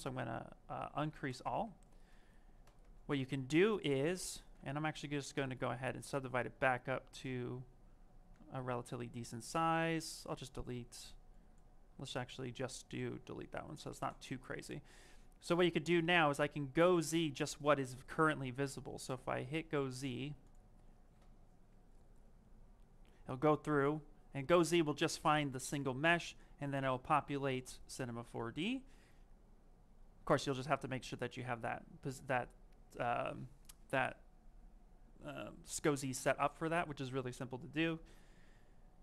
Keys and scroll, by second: 4.5 d.